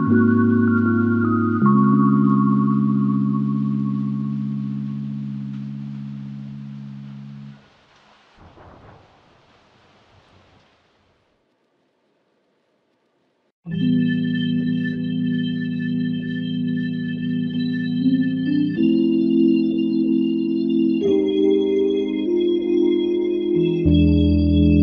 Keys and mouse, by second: 0.3 alt+click, 1.5 alt+click, 1.7 alt+click, 6.2 double click, 7.6 shift+click, 13.7 alt+click, 15.0 alt+click, 16.2 ctrl+click, 17.5 ctrl+click, 19.9 shift+click.